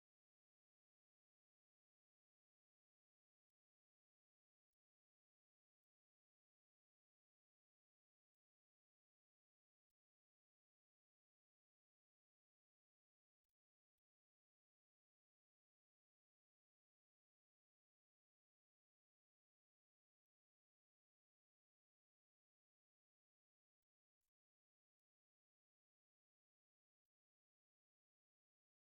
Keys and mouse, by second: 1.2 c, 3.5 w, 5.8 middle click, 6.4 z, 6.8 middle click, 8.0 a, 8.2 a, 8.5 middle click, 9.4 shift+middle click, 9.9 middle click, 10.6 right click, 11.6 a, 11.9 a, 12.3 middle click, 15.6 middle click, 16.2 shift+middle click, 17.0 right click, 18.1-20.1 typing, 19.3 shift+middle click, 20.9 ctrl+middle click.